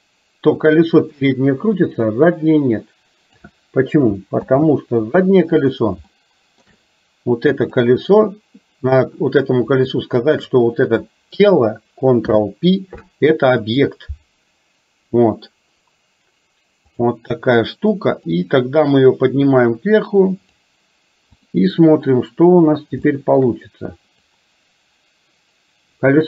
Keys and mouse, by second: 4.5 ctrl+z, 6.2 shift+middle click, 7.5 click, 10.3 shift+click, 12.3 ctrl+p, 18.5-20.6 drag, 21.4 click, 23.2 shift+middle click, 24.4-26.2 drag.